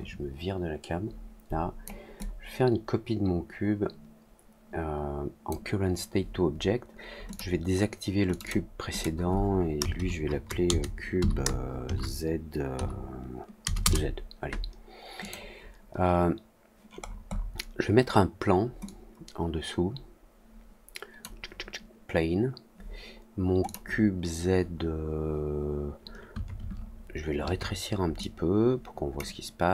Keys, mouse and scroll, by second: 0.0-1.8 drag, 2.1-5.4 drag, 7.2 click, 8.2 click, 8.4 click, 8.8 click, 15.1 click, 16.9-17.3 scroll down 2, 17.3 scroll up 1, 18.8-21.1 drag, 23.6 click, 28.1 click.